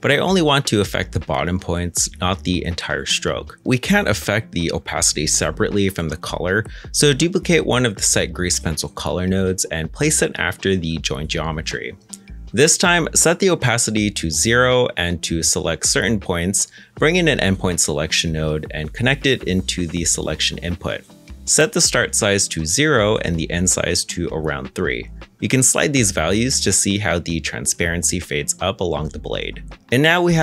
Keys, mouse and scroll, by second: 7.6 shift+d, 9.8 g, 15.2 shift+a, 16.7-17.6 typing, 17.8 Return, 23.2-24.5 scroll up 1, 24.5 0, 24.5 Return, 25.6 shift+middle click, 26.2-26.9 scroll up 1, 27.9 shift+click.